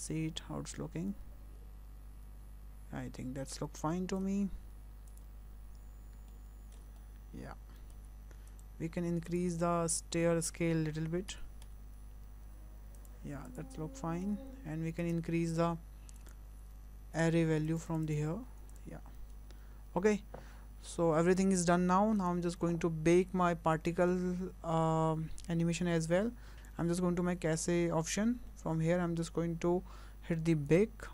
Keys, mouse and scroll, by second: 5.1 click, 6.3 ctrl+middle click, 7.0 shift+middle click, 8.5 click, 9.3 click, 11.3 s, 13.5 click, 13.8 Tab, 14.5 Tab, 15.0 click, 16.2 click, 17.7 click, 17.9 click, 18.1 click, 18.7 click, 22.2 click, 23.8 click, 25.1-26.5 scroll down 6, 26.6 click, 28.0 click, 28.7 scroll down 3, 30.7 click.